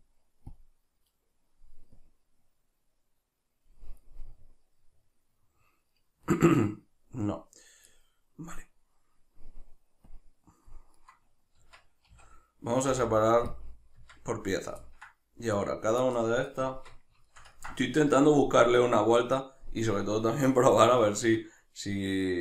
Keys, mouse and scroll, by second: 4.2-10.1 middle drag, 10.1 click, 11.0 right click, 11.6 Tab, 14.8-15.6 ctrl+middle drag, 15.6 right click, 16.6 Tab, 17.3-22.4 ctrl+shift+middle drag.